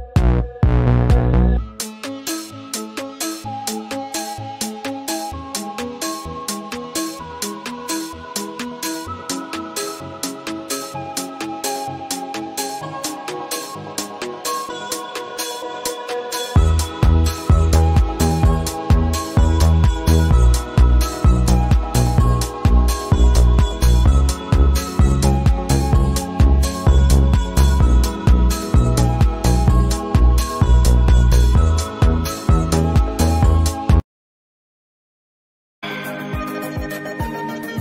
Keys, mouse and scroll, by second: 0.0 space, 0.0-0.8 click, 0.8 space, 1.7-4.5 drag, 5.4 v, 5.5 click, 6.5 i, 6.7 click, 7.7 v, 7.9 click, 8.4 right click, 10.0 click, 11.3 right click, 13.1 right click, 17.9-19.3 drag, 20.2 ctrl+z, 21.0-21.6 drag, 23.1 ctrl+g, 24.0 ctrl+2, 24.3 click, 24.6 space, 24.7 click, 24.9 space, 25.2-26.0 click, 26.5 space, 26.6 click, 26.8 space, 27.3 click, 28.4-28.8 alt+scroll down 1, 28.9 space, 28.9-29.7 click, 29.3 space, 29.9-30.9 drag, 32.8-35.4 drag.